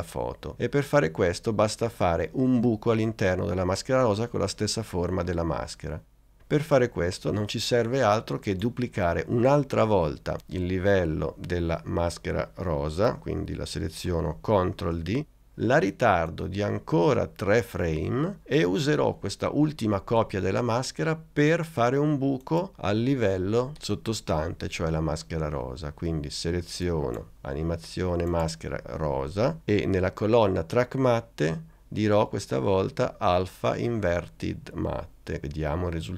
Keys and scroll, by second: 14.8 super+d.